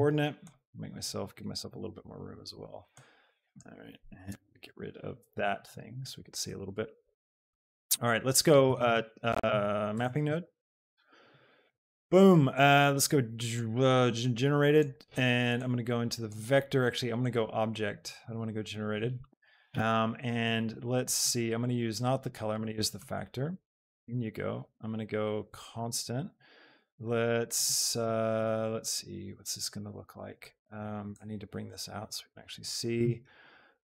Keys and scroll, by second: 4.2 n, 5.3 t, 8.6 a, 8.9 t, 10.0 BackSpace, 10.4 p, 11.1 Return.